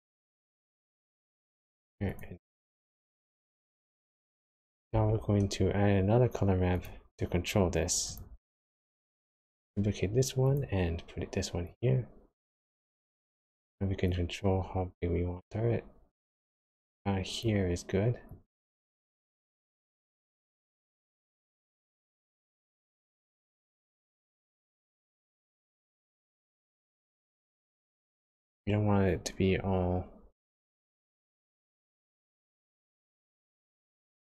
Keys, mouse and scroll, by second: 0.5 click, 2.2 ctrl+shift+click, 2.5 click, 4.9 shift+a, 8.0 click, 9.4 shift+d, 11.6 click, 14.0 click, 18.2 click, 21.2-21.8 scroll up 4, 21.8-22.2 scroll down 1, 22.4 shift+middle click, 23.8 click, 26.2 click, 33.1 click.